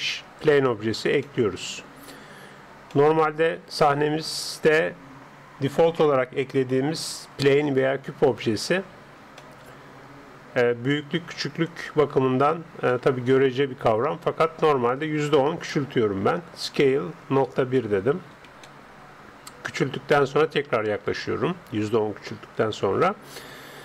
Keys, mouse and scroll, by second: 1.3-8.5 middle drag, 9.4-11.2 middle drag, 12.5-12.9 scroll up 1, 12.9-16.7 middle drag, 16.7 s, 19.7-23.8 middle drag.